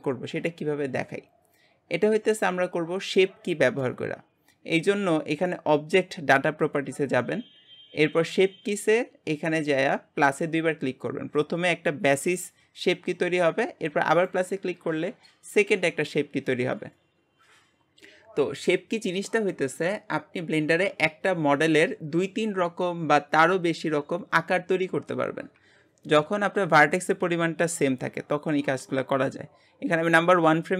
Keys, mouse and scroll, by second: 10.4-28.5 drag, 28.5 Tab.